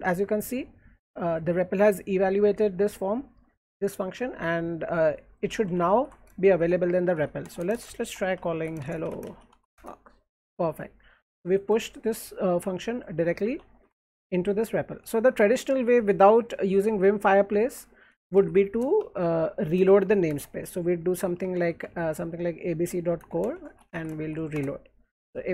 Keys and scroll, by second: 5.8 alt+Left, 6.9-10.4 typing, 10.9 alt+Right, 12.7 alt+Right, 13.7 alt+Left, 15.2 alt+Down, 15.2 alt+Up, 15.2 alt+Right, 17.8 Down, 18.4 alt+Left, 18.4 Up, 18.8-22.1 typing, 23.2-24.7 typing.